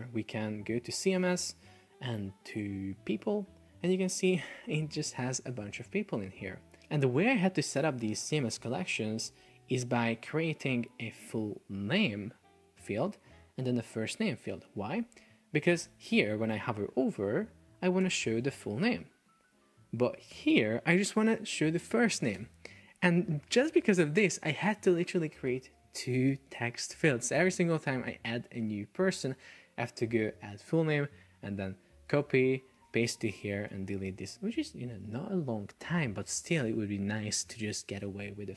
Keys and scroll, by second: 9.5 super+Tab, 15.9 super+Tab, 18.1 shift+super+4, 19.4 Escape, 22.6 super+Tab, 32.2 super+c, 32.9 super+v, 33.4 alt+BackSpace.